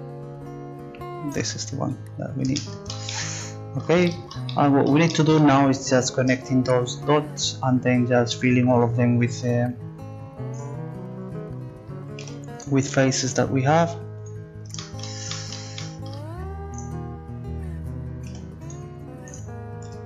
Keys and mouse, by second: 1.9-4.7 middle drag, 5.6 middle click, 12.2 g, 13.8 g, 14.9 click, 16.0-17.9 drag, 18.3 g, 19.8 g.